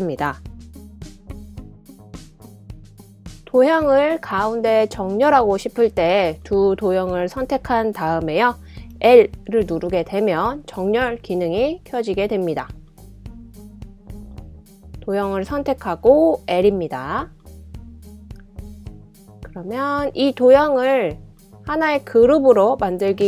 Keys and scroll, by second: 1.3 BackSpace, 8.7 l, 9.9 l, 15.0 l, 17.3 typing.